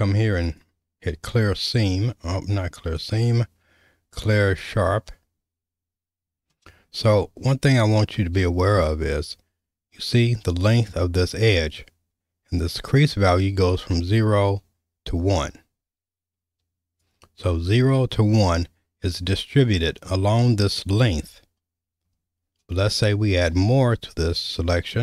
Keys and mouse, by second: 3.0-4.7 drag, 7.1-8.2 shift+middle drag, 13.7-17.1 drag, 22.9 shift+middle click.